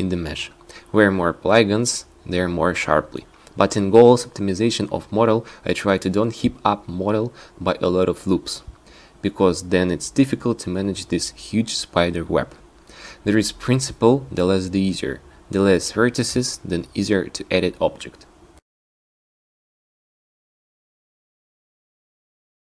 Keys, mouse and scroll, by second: 0.3 Tab, 0.7 Tab, 4.5 ctrl+r, 6.2 ctrl+r, 7.9 ctrl+r, 10.3 Tab, 12.6 Tab, 14.3 Tab, 15.3 ctrl+z, 16.0 ctrl+z, 17.2 Tab, 18.5 Tab, 19.8 Tab.